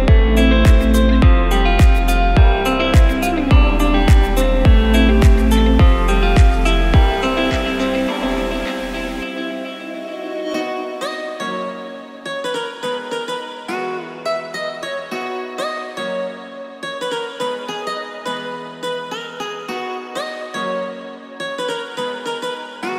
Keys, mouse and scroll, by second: 2.7 Tab, 5.3 click, 5.9 click, 8.0 click, 9.6 KP_1, 11.2 click, 12.0-12.8 scroll up 3, 13.3 click, 14.0 click, 14.6 Tab, 16.5 Tab, 17.7 click, 19.8 r.